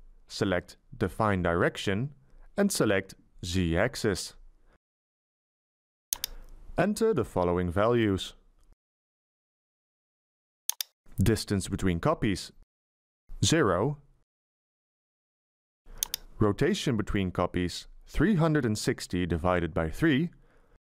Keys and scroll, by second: 11.1 BackSpace, 13.6 0, 16.7 BackSpace, 18.8 3, 19.4 6, 20.0 0, 20.8 /.